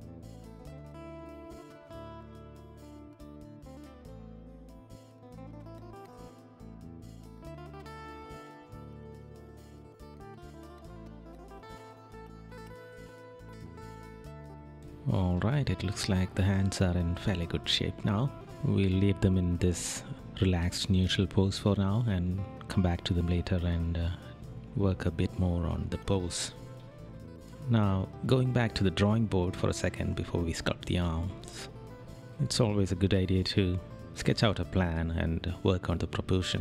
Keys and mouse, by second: 1.1 right click, 2.8 right click, 5.5 right click, 5.9 right click, 6.8 right click, 7.3 right click, 8.0 right click, 11.2 right click, 15.6 right click, 20.8 right click.